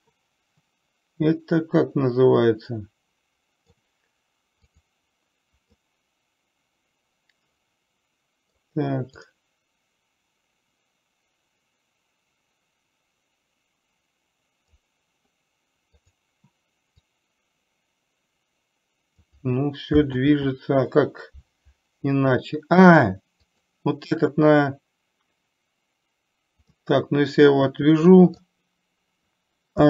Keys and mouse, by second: 0.3-4.2 middle drag, 6.2-8.9 middle drag, 9.6-15.3 drag, 16.4 click, 17.6-19.7 drag, 20.6 ctrl+z, 23.8 click, 27.1-28.8 middle drag.